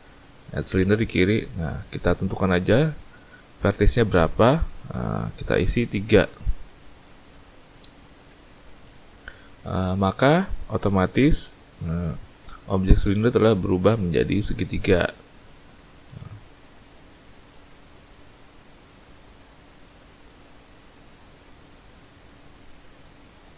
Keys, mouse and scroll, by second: 0.3 click, 4.2 click, 4.5 click, 4.6 click, 4.8 click, 6.1 click, 9.4 middle click, 10.5-11.4 scroll up 4, 12.0 middle click.